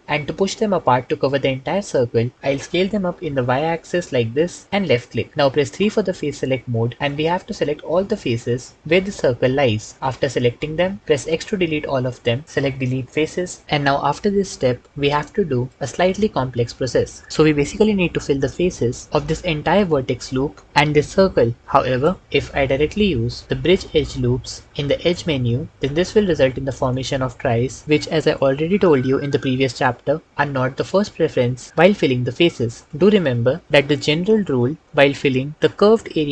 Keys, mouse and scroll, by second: 2.3 s, 2.8 y, 6.4 3, 11.0 x, 16.3 1, 23.4-25.1 drag.